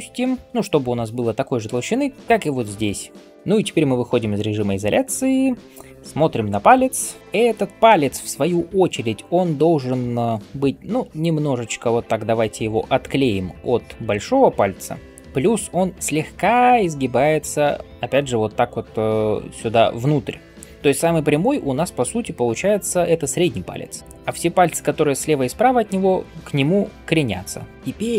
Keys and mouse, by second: 9.5-10.3 typing, 27.7-28.1 drag.